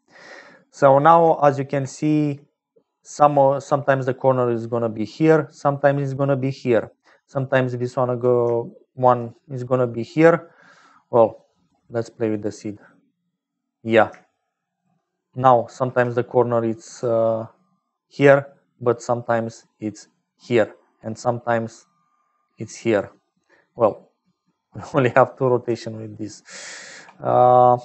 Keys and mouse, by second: 1.4 shift+click, 3.8-5.0 drag, 5.0-8.2 typing, 8.5 shift+middle click, 8.6 shift+click, 11.3 middle click, 12.2 click, 14.3 shift+click, 16.9 d, 17.4 d, 17.5 click, 18.4-23.2 typing, 19.5-22.7 drag, 23.2-24.6 drag, 24.6 d, 24.8 d, 25.5 d, 26.1 click, 27.0 d.